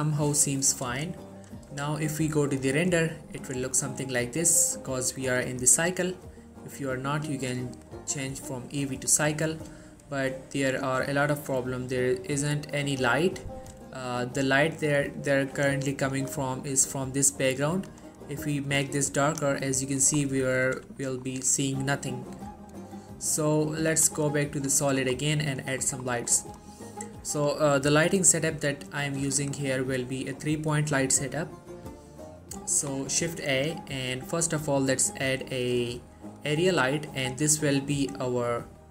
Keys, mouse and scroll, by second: 2.6 click, 5.0 click, 10.2-10.6 scroll down 1, 10.6-11.2 middle click, 11.4-11.8 scroll down 1, 12.3 middle click, 12.7 scroll down 1, 12.9-13.8 middle click, 13.9-14.3 scroll up 1, 14.3 middle click, 16.3 click, 19.8 middle click, 20.3 scroll down 1, 20.6 middle click, 21.0-22.5 shift+scroll up 2, 21.1 shift+middle click, 22.5 middle click, 24.0 click, 24.5 middle click, 24.9 typing, 25.0 shift+middle click, 25.3 middle click, 26.5 shift+middle click, 26.7-28.8 scroll up 1, 29.1 middle click, 29.6 shift+middle click, 30.4 scroll up 1, 31.9-32.2 scroll down 1, 32.2-33.2 middle click, 33.4 shift+a, 36.7 click, 37.6-38.9 middle drag.